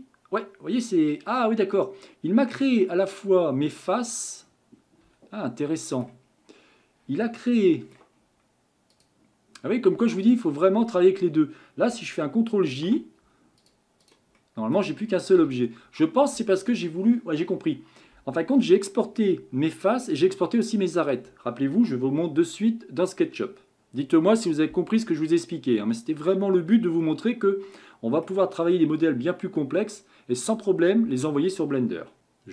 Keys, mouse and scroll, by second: 5.6-6.3 middle drag, 6.3-7.6 scroll up 4, 7.6-8.2 shift+middle drag, 8.2 scroll up 3, 8.9 click, 10.2 shift+click, 10.8 scroll down 1, 12.7 ctrl+j, 13.6 click, 14.0 click, 14.4-15.4 middle drag, 15.4 g, 27.0-27.4 scroll down 2, 27.4-30.5 middle drag.